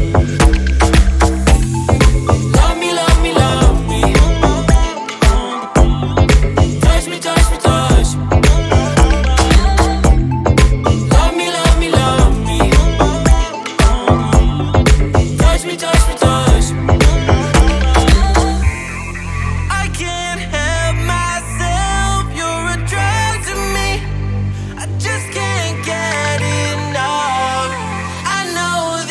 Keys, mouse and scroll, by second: 0.0 x, 1.0-1.3 scroll down 3, 1.3-1.8 scroll up 1, 1.9-2.3 scroll down 4, 2.6-3.4 middle drag, 3.4-4.5 scroll down 1, 6.4-7.7 drag, 7.7-8.3 scroll down 4, 8.3-11.3 middle drag, 12.7-15.3 middle drag, 15.3 click, 17.2 click, 17.8-20.8 middle drag, 22.7-23.6 scroll up 1, 23.6-24.2 scroll down 1, 24.2-27.3 middle drag, 27.6-29.1 drag.